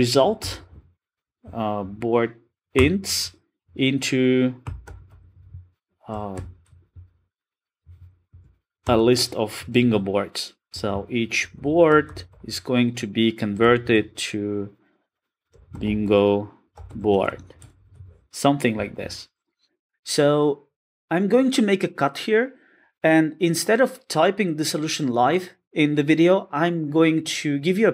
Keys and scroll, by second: 2.8 Return.